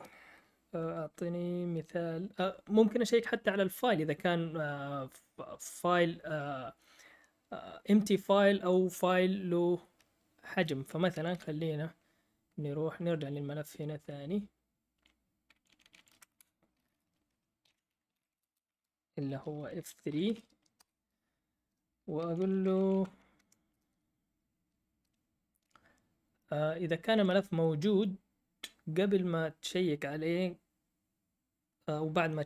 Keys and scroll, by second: 12.9 Up, 15.7 Up, 15.7 Down, 15.9 Down, 16.0 Down, 17.6 ctrl+l, 17.8-20.7 typing, 21.9-23.1 typing, 23.3 Right.